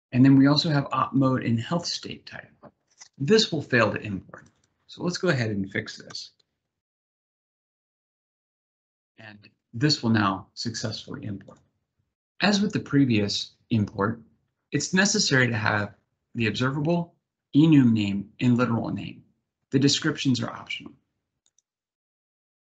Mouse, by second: 0.6 click, 1.4 click, 4.2 click.